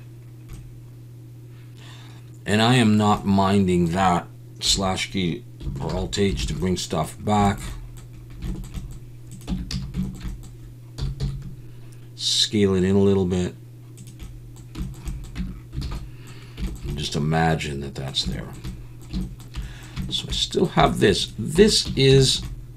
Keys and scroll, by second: 5.9 alt+h, 6.4 alt+a, 9.5 Tab, 9.7 a, 11.0 s, 11.2 x, 15.4 Tab, 15.8 alt+a, 21.6 Tab, 21.9 a.